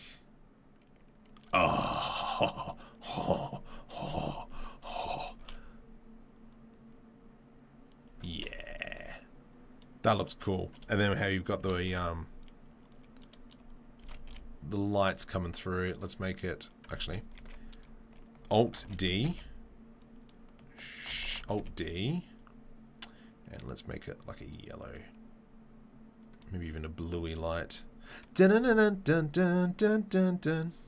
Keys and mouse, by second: 5.0 shift+right click, 5.4 shift+space, 5.5-8.2 drag, 8.3 shift+space, 10.2-17.5 middle drag, 11.6 shift+d, 14.0 shift+d, 17.1 ctrl+z, 17.5 ctrl+z, 18.7 alt+d, 21.1 alt+d, 23.1 click, 30.0 click, 30.2-30.8 middle drag.